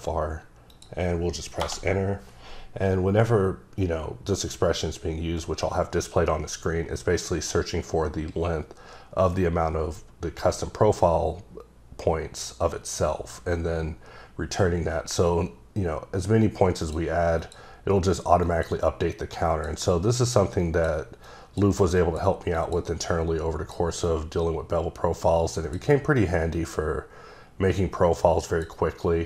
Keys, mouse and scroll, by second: 0.7 click, 16.8 click, 17.4 click, 18.4 click, 19.3 click, 19.8 double click, 21.2 click, 22.0 click, 22.6 click, 23.0 click, 24.0 click, 26.2 click.